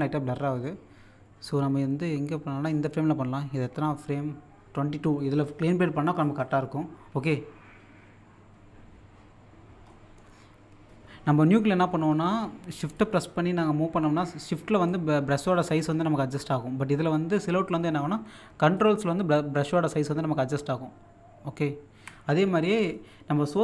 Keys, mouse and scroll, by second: 7.5-9.1 scroll up 1, 9.9 middle click, 12.2 middle click, 12.9-17.7 shift+drag, 17.7-18.5 scroll up 1, 18.7-23.6 ctrl+drag.